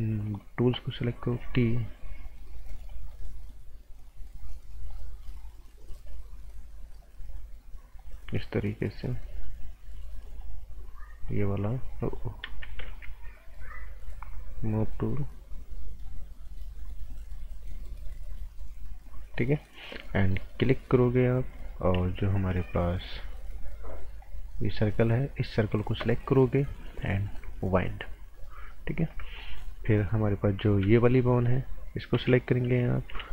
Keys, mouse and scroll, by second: 0.2 click, 1.4 t, 2.9 click, 14.8 click, 19.4 scroll down 1, 19.6 right click, 20.2 right click, 22.5 g, 23.6 click, 27.3 click, 28.7 scroll down 1, 28.9 right click, 29.2 scroll down 1, 29.4 right click, 29.7-30.8 scroll up 1, 30.8 b, 31.4 click, 33.1 t.